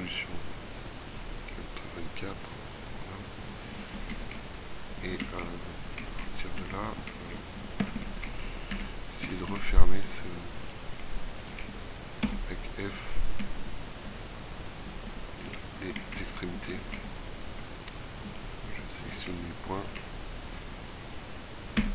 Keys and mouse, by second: 3.3 middle click, 4.2 middle click, 6.7 z, 7.9 Tab, 8.9 a, 9.3 a, 9.7 a, 11.9 f, 13.5 z, 15.7 a, 21.2 f.